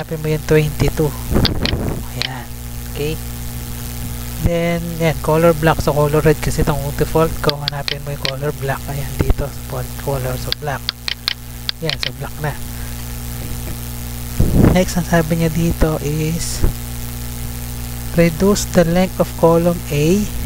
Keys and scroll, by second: 3.8 Tab, 5.4 Tab, 14.3 Tab.